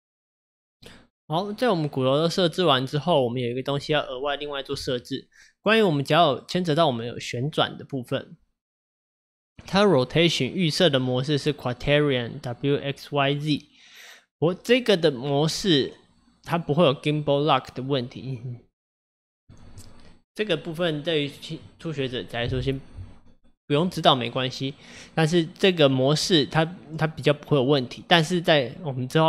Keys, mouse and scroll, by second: 0.9-3.9 middle drag, 6.3 click, 7.1 click.